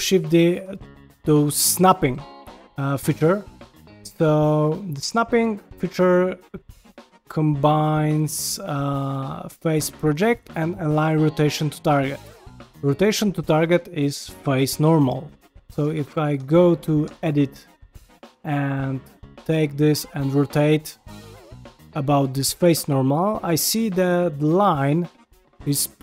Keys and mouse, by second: 0.3 r, 1.1 click, 1.4 r, 2.1 g, 2.6 shift+middle drag, 3.0 ctrl+middle click, 3.4 shift+middle click, 3.9 middle click, 4.5 shift+middle click, 5.8 click, 6.1-6.9 drag, 8.2 click, 8.5-11.9 drag, 15.7 Tab, 16.3 Tab, 16.7 click, 17.0 Tab, 17.7 click, 19.1 g.